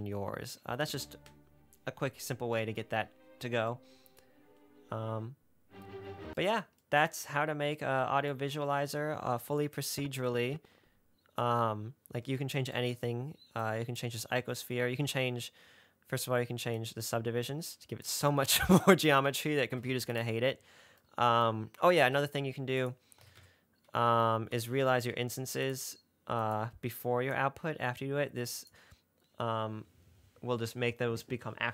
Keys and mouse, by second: 0.9 space, 6.4 space, 10.0-11.7 drag, 13.9 click, 17.0-18.4 drag, 19.2-20.5 drag, 22.3 shift+a, 27.5 click, 28.2 click.